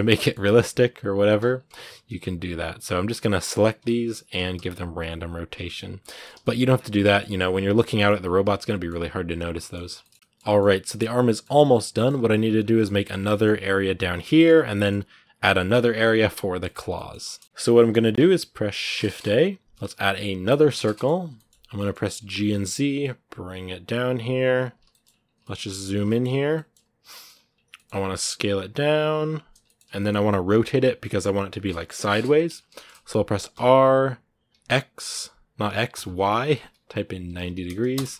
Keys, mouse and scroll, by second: 0.0 middle click, 0.2 a, 1.3 scroll up 2, 2.5-3.6 right drag, 3.6 l, 5.3 scroll down 4, 5.5 middle click, 6.1 a, 6.2 middle click, 6.7 scroll down 6, 6.9-7.9 shift+middle drag, 7.9-8.2 scroll up 2, 8.2 shift+middle click, 9.0-9.4 scroll up 3, 9.4 shift+middle click, 9.7 scroll down 2, 9.8-12.4 shift+middle drag, 12.4 scroll up 2, 12.5-14.1 shift+middle drag, 14.1 scroll down 1, 14.1-16.7 middle drag, 16.7-17.2 scroll up 1, 17.2 shift+middle click, 17.5 scroll up 1, 17.6-20.3 middle drag, 20.3 shift+a, 20.7 shift+middle click, 21.0-21.5 scroll down 3, 21.1 middle click, 21.5 middle click, 22.0 g, 24.7 shift+middle click, 24.8 shift+scroll up 2, 25.2 shift+middle click, 25.5 scroll up 1, 25.8-27.2 shift+middle drag, 27.2 scroll up 2, 27.5 middle click, 27.9 s, 29.4-32.2 shift+middle drag, 32.2 scroll up 1, 32.5 shift+middle click, 33.3 r, 37.9 scroll down 1.